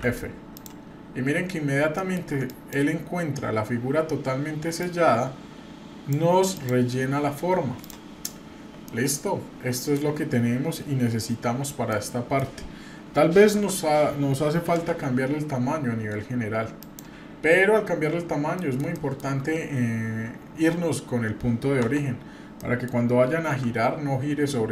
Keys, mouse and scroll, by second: 0.5 click, 1.0-1.4 scroll up 2, 1.4 scroll down 1, 2.0 shift+middle click, 2.5 click, 3.2 scroll up 1, 4.8-6.1 drag, 6.5 click, 7.1 scroll down 1, 7.8 click, 7.8-8.8 scroll down 4, 8.8-9.9 middle drag, 11.9 middle click, 13.5 a, 14.8 s, 17.7-18.0 scroll up 2, 18.5 shift+middle click, 21.8 Tab, 22.6 middle click, 22.8 scroll down 1, 23.5-24.7 scroll down 1, 23.5 r.